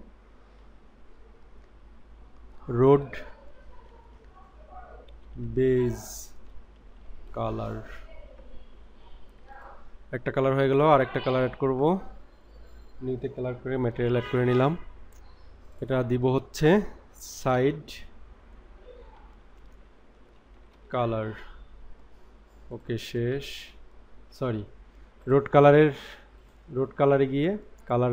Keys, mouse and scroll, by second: 10.7 click, 11.8 click, 15.5 click, 15.8-22.8 drag, 25.8 click, 26.4 click.